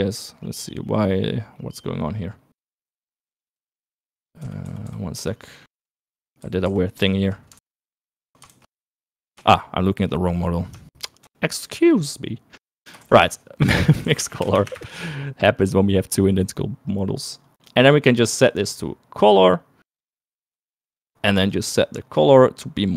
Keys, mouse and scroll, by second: 1.5 middle click, 2.3 middle click, 3.4 middle click, 4.8 ctrl+z, 5.5 ctrl+z, 5.7 ctrl+z, 5.9 ctrl+z, 6.2 middle click, 6.9 ctrl+z, 7.1 ctrl+z, 7.5 ctrl+z, 7.8 ctrl+z, 8.6 ctrl+z, 8.8 ctrl+z, 9.4 ctrl+z, 10.2 shift+middle click, 11.2 shift+click, 12.5 shift+click, 14.1 shift+a, 18.3 click, 19.5-21.2 drag, 22.4 click.